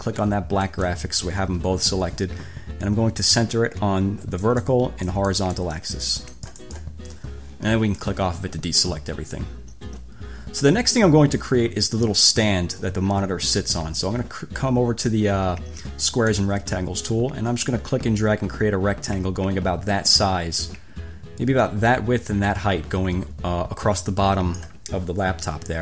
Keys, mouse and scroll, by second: 0.9 shift+click, 4.6 click, 5.3 click, 5.8 click, 6.6 click, 8.2 click, 16.3 click, 18.4-25.0 drag.